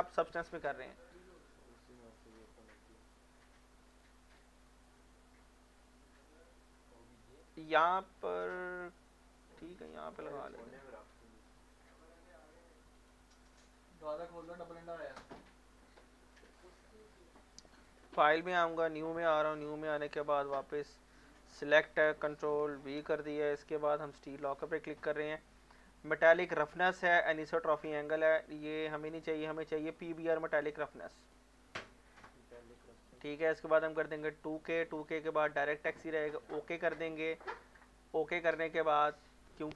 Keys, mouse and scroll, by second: 6.3-13.0 drag, 19.3 click, 22.5 ctrl+v, 24.0 click, 28.8 click, 28.8 click, 31.2 click.